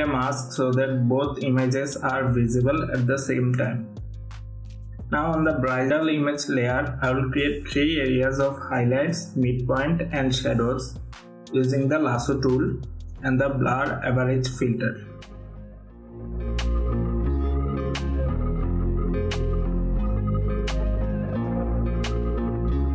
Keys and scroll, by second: 0.3 Return, 7.3 ctrl+=, 11.7 ctrl+=, 16.8 ctrl+d, 20.1 ctrl+alt+f, 20.7 ctrl+d, 22.4 ctrl+z.